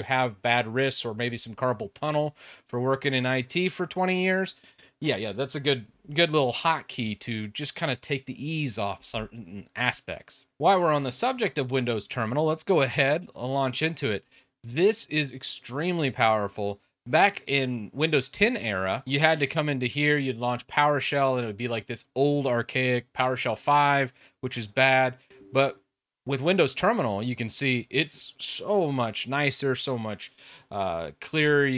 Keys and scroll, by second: 10.8 super+2.